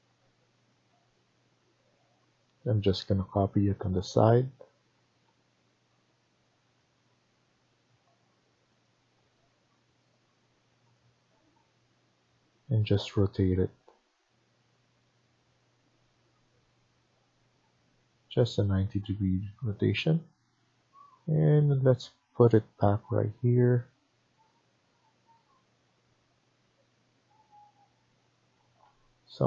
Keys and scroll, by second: 4.8 Escape, 5.1 Escape, 11.2 Escape, 11.5 Escape, 18.9 Escape, 28.5 Escape, 28.8 Escape.